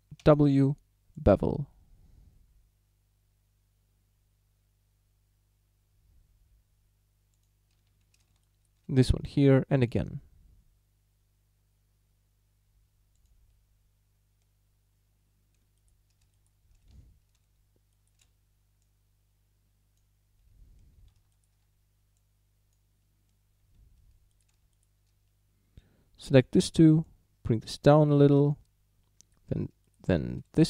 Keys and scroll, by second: 0.3 w, 7.9 a, 9.4 w, 16.9 a, 21.0 a, 23.7 a.